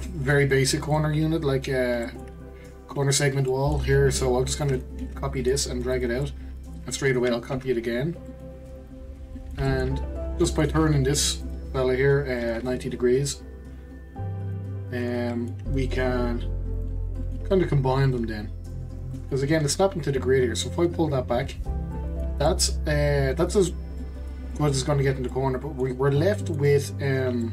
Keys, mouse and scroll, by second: 0.0-0.9 middle drag, 0.9 click, 2.0-5.0 shift+middle drag, 5.0 shift+d, 6.2-7.5 middle drag, 7.5 shift+d, 9.3 middle click, 10.2 scroll up 1, 10.5 middle click, 11.4-12.5 drag, 15.3-16.7 middle drag, 16.7 click, 17.2 middle click, 18.1 click, 19.1-20.7 middle drag, 20.7 click, 21.9-22.8 middle drag, 22.8-24.0 scroll up 1, 24.0-27.5 middle drag.